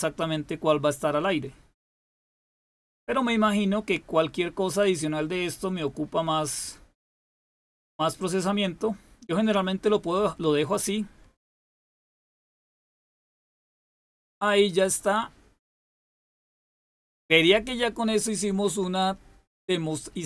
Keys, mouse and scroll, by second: 7.2 click, 15.9 click.